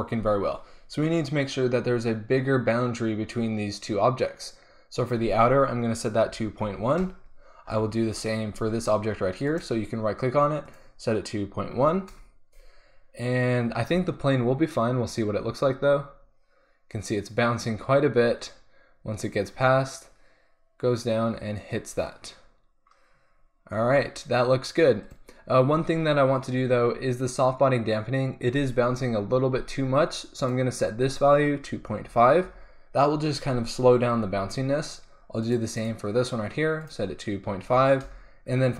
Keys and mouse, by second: 9.5-10.7 right drag, 11.3-13.9 drag, 13.9 alt+a, 23.8 alt+a, 25.1-27.0 drag, 30.5-36.8 drag, 36.8-38.4 middle drag, 38.4-38.7 drag.